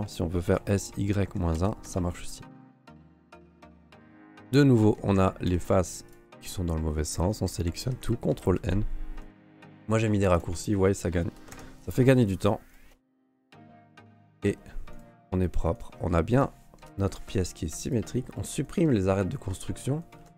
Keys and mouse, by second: 0.6 s, 3.0 g, 4.1 a, 4.3 a, 5.0 a, 5.1 Tab, 5.5 q, 7.1 Tab, 7.5 a, 8.3 ctrl+n, 9.2 q, 11.5 ctrl+Tab, 12.0 alt+click, 12.7 alt+click, 13.1 click, 13.8 alt+click, 14.9 alt+shift+right click, 15.7 alt+shift+right click, 16.3 alt+shift+right click, 16.8 Delete, 18.6 right click, 19.0 middle click, 20.0 alt+shift+click.